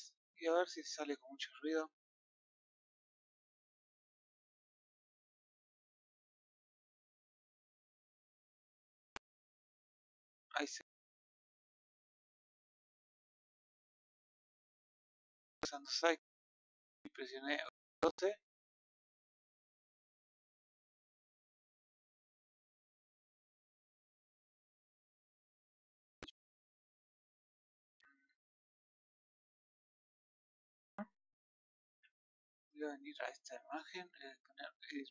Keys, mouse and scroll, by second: 31.6 Escape, 32.9-35.1 middle drag.